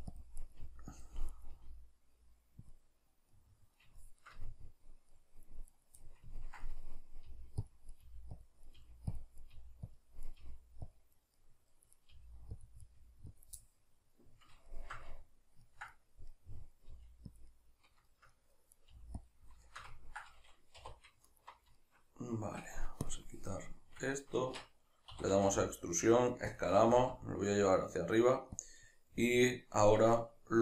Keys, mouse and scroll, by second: 0.2 click, 0.4 right click, 0.6 g, 1.0 click, 1.3 right click, 1.6 g, 2.7 click, 3.3-5.7 middle drag, 5.7 right click, 6.0-7.7 middle drag, 7.3-10.4 typing, 7.7 click, 7.9 right click, 8.5 click, 8.7 right click, 9.2 click, 9.4 right click, 10.0 click, 10.2 right click, 10.9 click, 11.3 middle click, 12.0 right click, 12.2 g, 12.7 click, 12.8 right click, 13.0 g, 13.4 click, 13.6-17.4 middle drag, 16.9 g, 17.4 click, 17.5-18.8 middle drag, 18.8 right click, 18.9 g, 19.3 click, 19.7-21.2 ctrl+shift+middle drag, 20.8 2, 21.2-21.8 alt+right drag, 21.8-23.1 shift+middle drag, 23.1-23.8 drag, 23.8-30.6 middle drag, 24.4 shift+Tab, 25.2 e, 26.6 click, 26.9 g, 28.7 click.